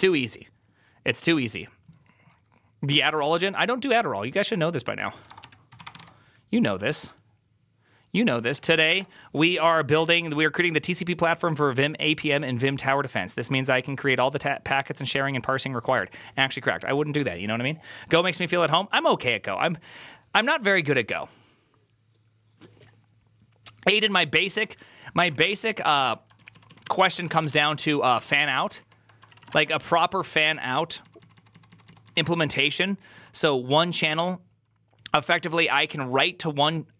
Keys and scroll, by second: 5.9 typing, 8.2-9.3 typing, 25.0-28.0 typing, 26.4 ctrl+u, 26.7 ctrl+u, 28.0 ctrl+u, 29.1-33.0 typing.